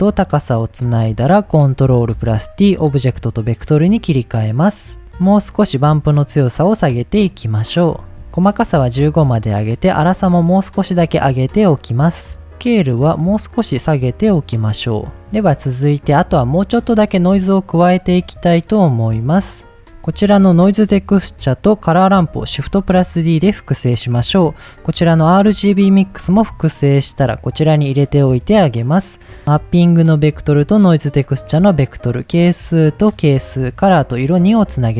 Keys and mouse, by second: 0.6 click, 1.9 ctrl+t, 3.3-4.1 drag, 4.4-5.0 drag, 5.6 middle click, 6.6-8.2 drag, 8.5 click, 9.3-10.9 drag, 12.5-14.2 drag, 15.1 middle click, 17.4 middle click, 18.2 middle click, 19.2 click, 20.0 click, 20.9 shift+d, 21.7 click, 22.2 click, 22.5 shift+d, 23.1 click, 24.4 click, 26.1 shift+d, 26.9 drag, 29.4-30.8 drag, 31.4-32.5 drag, 33.3-34.4 drag.